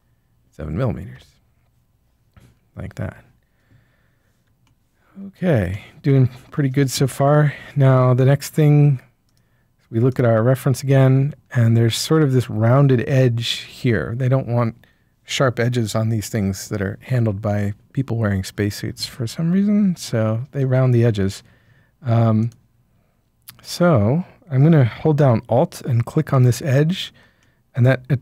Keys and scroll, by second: 1.1 Return.